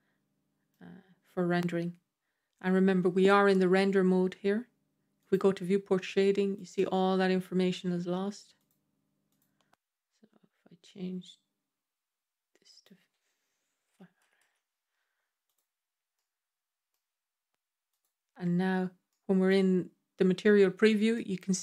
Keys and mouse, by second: 5.1 click, 6.4 click, 8.4 click, 9.1 click, 12.7-15.4 drag, 14.3 KP_0, 16.0-16.8 middle drag, 17.8 click, 18.9-19.3 middle drag, 21.0-21.6 middle drag.